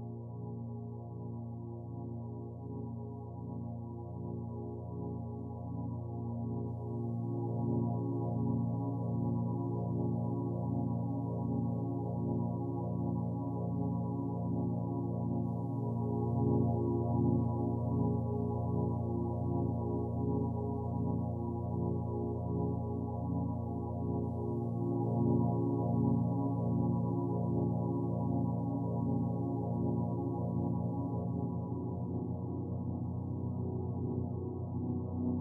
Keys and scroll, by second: 29.3 shift+F5.